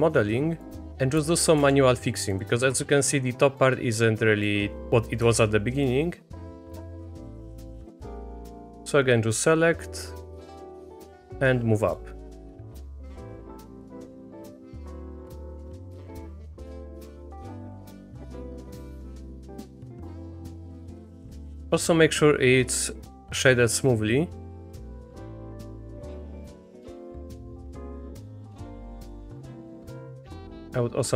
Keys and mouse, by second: 0.0 click, 0.7 middle click, 0.8 Tab, 1.3 shift+click, 1.6 1, 2.3 click, 2.7 Tab, 3.6-5.2 drag, 5.2 Tab, 6.8 shift+click, 8.2-12.0 drag, 12.6-14.4 drag, 14.7 click, 16.1 shift+click, 16.7 click, 17.9 click, 18.1 Tab, 18.6 drag, 18.9 shift+drag, 19.2 Tab, 19.5 middle click, 19.8 a, 20.5-24.9 drag, 25.2 3, 25.4-26.0 drag, 26.1 Tab, 26.2 click, 26.4-27.3 middle drag, 27.5-28.6 middle drag, 29.1 middle drag, 29.4 shift+drag, 29.7 middle drag, 30.4 Tab, 31.0 click.